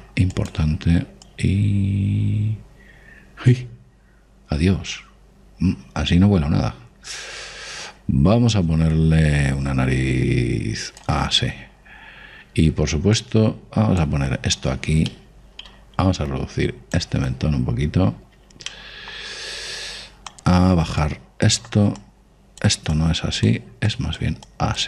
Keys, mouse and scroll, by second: 0.0 shift+f, 1.4-4.1 drag, 12.2-13.0 scroll up 1, 13.0-15.1 middle drag, 14.1 click, 16.1-18.0 middle drag, 17.2 click, 19.0-22.9 middle drag, 21.3-24.8 drag.